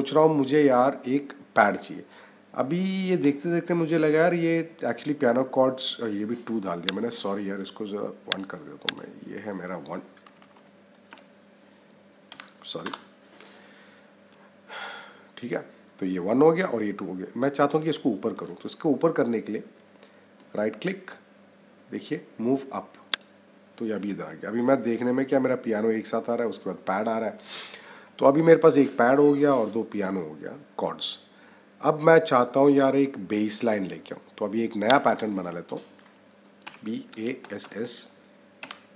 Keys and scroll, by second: 10.1 Right, 10.9 BackSpace, 12.7 Return, 36.5 b.